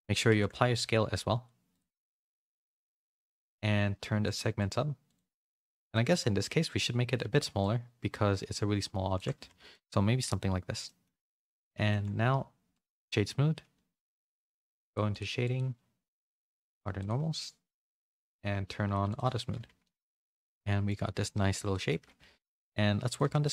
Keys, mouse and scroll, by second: 0.2 ctrl+a, 2.9 shift+middle click, 4.2 click, 5.0 click, 5.9 shift+middle click, 6.4 middle click, 7.5-9.3 shift+drag, 9.3 a, 9.5 a, 9.7 middle click, 10.8 middle click, 11.8 middle click, 12.7 right click, 14.4 click, 14.8 click, 15.1 click, 16.9 click, 19.0 click, 19.5 a, 19.8-21.0 middle drag, 19.8 a, 21.0 a, 21.1 a, 21.3 middle click, 21.6 shift+middle click, 22.1 a, 22.4 middle click, 23.1 click, 23.2 Tab, 23.4 middle click.